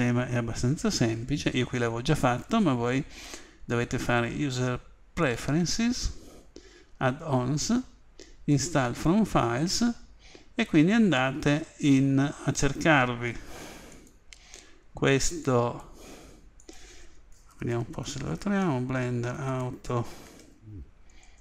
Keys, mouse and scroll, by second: 2.3 click.